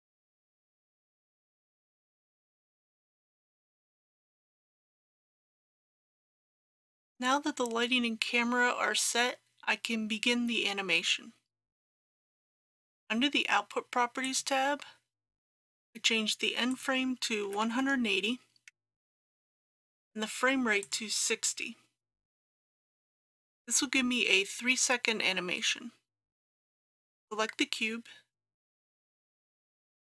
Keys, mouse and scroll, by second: 0.2 KP_3, 0.4 KP_0, 2.3 click, 3.3-4.7 scroll up 1, 4.7-5.3 scroll down 1, 5.7 click, 17.5 KP_1, 17.7 KP_8, 17.8 KP_0, 20.8-30.0 drag.